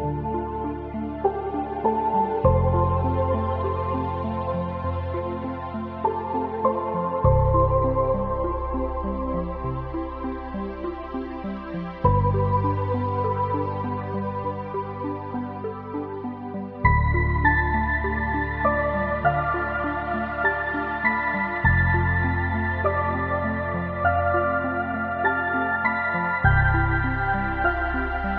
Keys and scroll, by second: 1.3 ctrl+z.